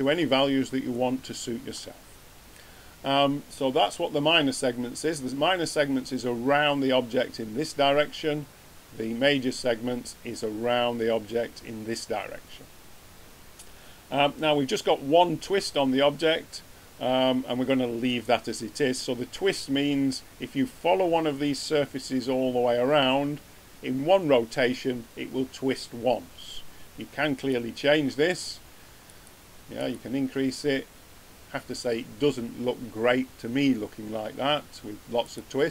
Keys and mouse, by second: 0.0-1.1 middle drag, 27.3 click, 35.2 click.